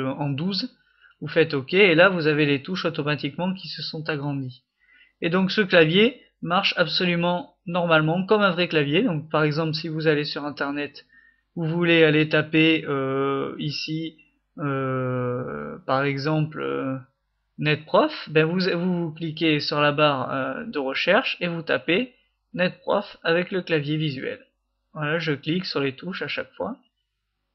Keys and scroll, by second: 1.2-3.6 typing, 4.7-7.1 typing, 8.7 é, 8.8 Caps_Lock, 11.5 Escape, 16.0 F3, 16.0 ', 16.3 (, 17.6-18.6 typing, 20.5-27.5 typing.